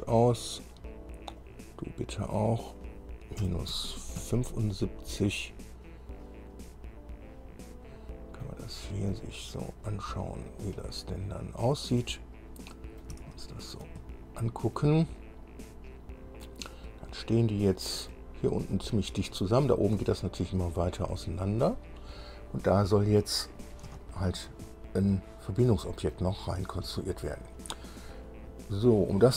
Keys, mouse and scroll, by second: 1.6 click, 2.7 click, 3.6 KP_Subtract, 3.9 KP_7, 4.4 KP_5, 6.2 scroll up 1, 6.7-7.1 scroll up 1, 7.4 scroll down 1, 7.9 click, 9.3 scroll down 1, 9.9-12.0 drag, 12.5 click, 13.5-15.1 shift+drag, 15.4 click, 16.2-16.6 scroll up 1, 16.9-18.5 drag, 18.7-19.4 scroll up 1, 20.0 scroll down 1, 20.4 scroll up 1, 22.3-23.3 scroll down 4, 24.3 shift+middle click, 25.1-26.5 middle drag.